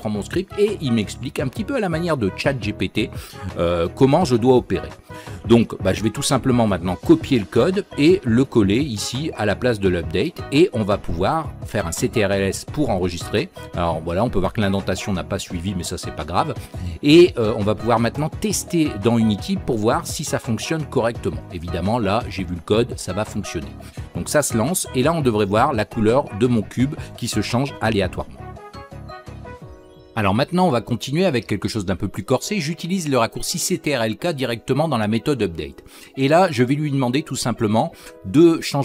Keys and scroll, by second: 29.8 ctrl+k.